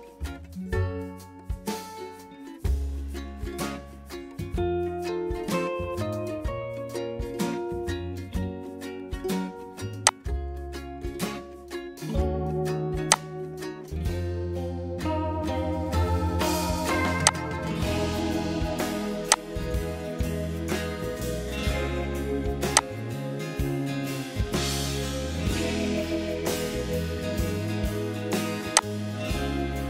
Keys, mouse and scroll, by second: 1.6-7.4 typing.